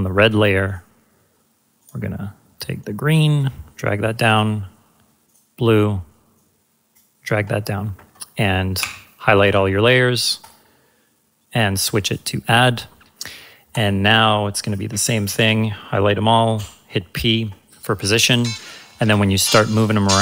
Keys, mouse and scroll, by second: 3.1-3.4 click, 10.4 click, 16.5 p.